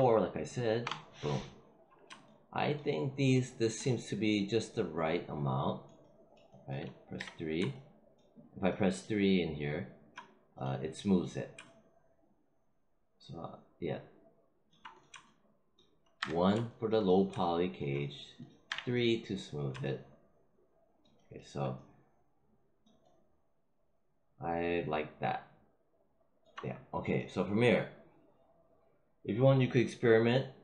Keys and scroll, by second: 0.7 Return, 7.1 3, 16.1 1, 18.6 3.